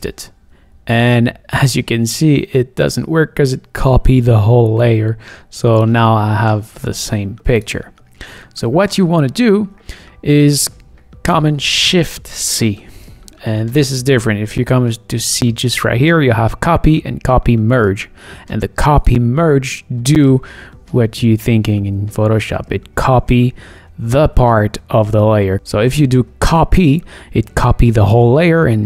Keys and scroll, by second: 8.5 super+z, 9.2 super+z, 12.5 shift+super+c.